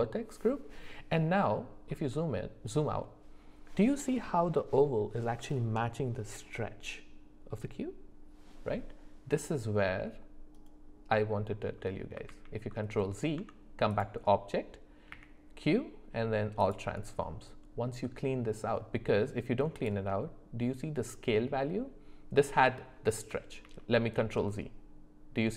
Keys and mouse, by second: 10.5 middle click, 12.3 ctrl+z, 13.3 Tab, 15.1 q, 19.8 click, 23.7 ctrl+z.